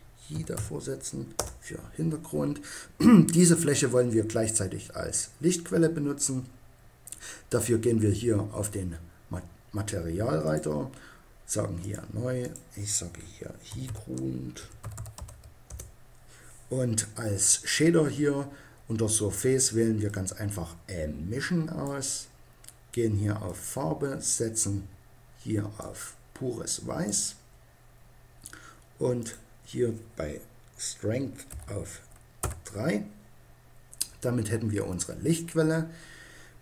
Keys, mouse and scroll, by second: 10.4-11.9 drag, 14.1-20.0 middle drag, 21.8-23.4 middle drag, 25.0 click, 29.1-30.9 drag.